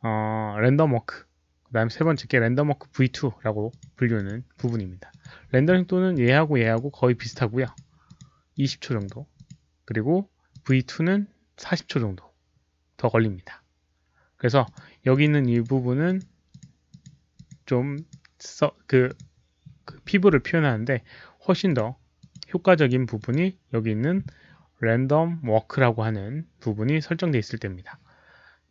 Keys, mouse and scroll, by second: 1.1 click, 1.9 click, 2.7 click, 3.6 click, 4.1 click, 4.5 click, 5.0 click, 6.1 click, 6.5 click, 7.1 click, 7.6 click, 8.0 click, 8.5 click, 8.9 click, 9.3 click, 10.4 click, 12.2 click, 14.6 click, 15.0 click, 15.4 click, 16.0 click, 16.4 click, 16.8 click, 17.3 click, 17.9 click, 19.0 click, 21.6 click, 22.1 click, 22.7 click, 23.1 click, 24.0 click, 24.8 click, 25.1 click, 26.0 click, 26.8 click, 27.7 click.